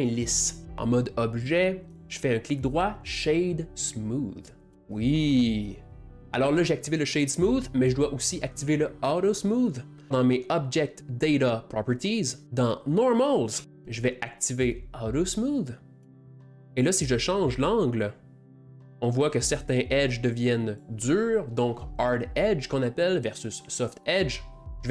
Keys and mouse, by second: 0.8-2.0 shift+middle drag, 2.0-4.7 right drag, 5.0-6.1 ctrl+middle drag, 6.1 click, 12.4 click, 13.6-16.0 drag, 17.4 click, 19.7 click, 24.6-24.9 drag.